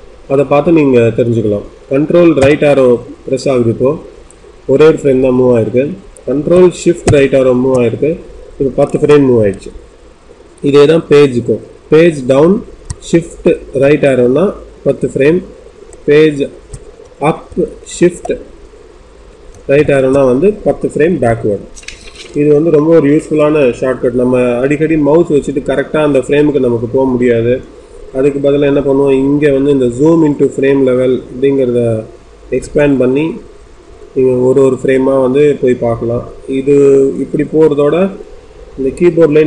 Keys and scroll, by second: 11.9 Page_Down, 17.0 Page_Up, 17.9 Page_Up.